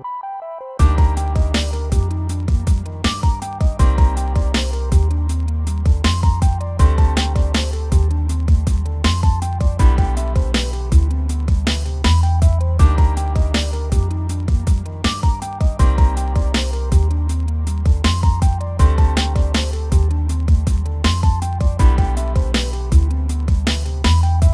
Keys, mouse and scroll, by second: 0.0 shift+middle click, 0.1 scroll up 1, 0.3 middle click, 0.5 click, 0.8 shift+middle click, 1.3 click, 2.2 shift+middle click, 2.3 click, 2.5 scroll down 1, 2.6 middle click, 2.8 scroll up 1, 2.9 click, 3.1 scroll down 1, 3.2 middle click, 3.3 click, 3.6 shift+middle click, 3.7 scroll up 1, 3.8 click, 4.0 scroll down 1, 4.1 middle click, 6.8 middle click, 7.0 scroll up 2, 7.1 shift+middle click, 7.3-11.2 middle drag, 11.3 scroll down 2, 11.4 middle click, 12.0-12.3 scroll up 1, 12.3-13.3 scroll down 1, 13.3 shift+middle click, 13.8-15.1 scroll up 6, 14.0 shift+middle click, 14.5 click, 15.1 click, 15.3 f, 15.6 click, 15.8 f, 16.0 click, 16.4 scroll down 1, 16.5 middle click, 16.9 click, 17.3 scroll down 1, 18.1-18.6 scroll down 9, 18.3 middle click, 18.6-19.1 scroll up 8, 19.1 f, 19.3 click, 19.5 scroll down 2, 19.6-20.9 middle drag, 20.9 f, 21.1 shift+click, 21.6-22.2 scroll down 2, 21.8 shift+click, 22.2 middle click, 23.1 scroll up 2, 23.2 shift+middle click, 23.8 click, 24.3 f.